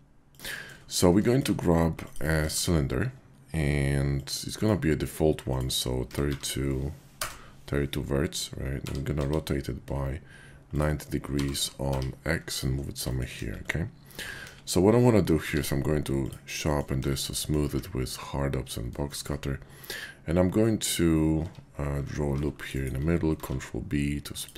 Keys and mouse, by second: 0.5 shift+click, 1.2 shift+click, 2.0 click, 2.4 shift+a, 4.3 click, 5.5-7.3 drag, 8.6 r, 9.2 x, 10.7 ctrl+click, 11.2 g, 11.6 u, 11.9 y, 12.5 click, 13.3 KP_5, 14.4 KP_5, 15.3 q, 17.0 KP_5, 17.3 drag, 17.7 `, 19.1 shift+drag, 21.3 Tab, 22.3 ctrl+r, 22.8 click, 23.3 ctrl+b, 24.4 click.